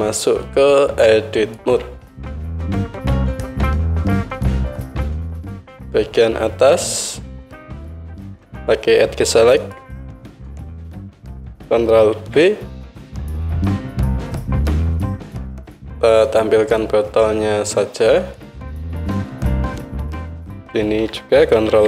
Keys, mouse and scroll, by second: 1.8 Tab, 6.7-9.6 alt+middle drag, 9.6-11.0 drag, 11.0-14.4 alt+middle drag, 12.2 ctrl+b, 14.4-20.5 drag, 15.3 KP_Divide, 20.5-21.8 alt+middle drag, 21.7 ctrl+b.